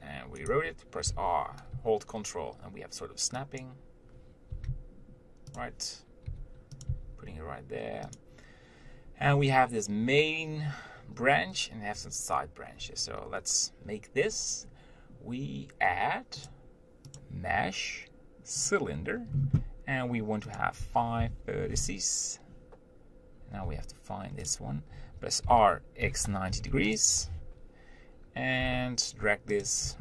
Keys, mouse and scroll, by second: 0.0 r, 1.3 r, 6.5 g, 7.1 s, 18.9-22.5 drag, 23.9 g, 25.7 r, 28.9 g.